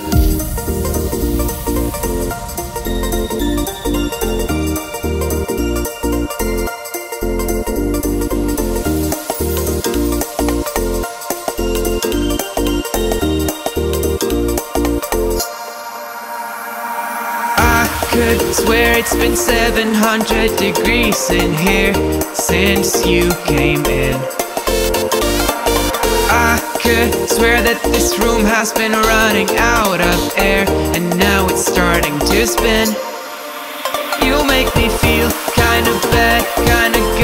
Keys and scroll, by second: 20.5 ctrl+j.